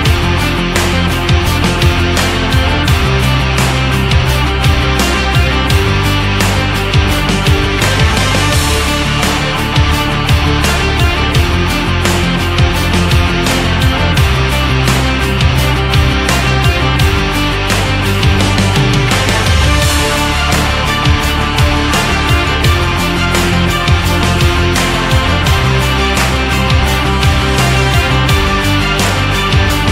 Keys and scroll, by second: 16.6 1, 17.0 3, 17.3 5, 17.8 Return, 19.0 ctrl+z.